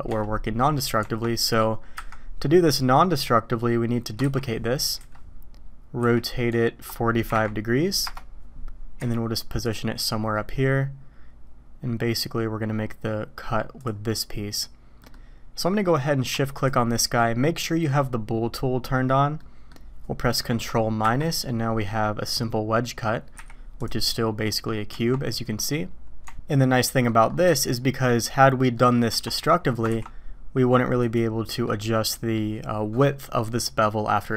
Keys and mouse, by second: 1.0 Tab, 1.9 KP_1, 4.2 shift+d, 6.0 r, 9.0 g, 10.0 s, 14.1-15.0 middle drag, 15.1-15.7 middle drag, 16.5 shift+click, 19.3 middle click, 21.0 ctrl+KP_Subtract, 21.9-22.3 drag, 23.4 h, 23.8 click, 24.5 click, 24.9 Tab, 26.5 Tab, 26.5-27.1 drag, 28.7 click, 29.1 Tab, 29.9 ctrl+b, 31.5 click, 32.1 drag.